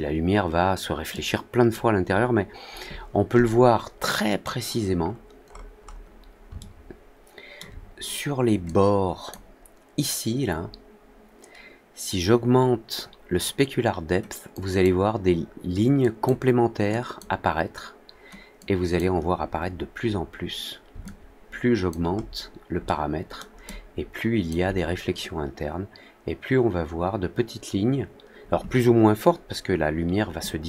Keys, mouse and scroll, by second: 1.0-1.6 drag, 4.0 click, 4.9 middle click, 5.4-6.0 scroll up 2, 6.5-7.5 alt+middle drag, 8.6 click, 14.4 click, 15.9 click, 16.8 drag, 18.5-18.9 drag, 20.1 middle click, 21.0 alt+click, 22.1 alt+scroll down 1, 22.8-23.3 alt+middle drag, 23.6 alt+click.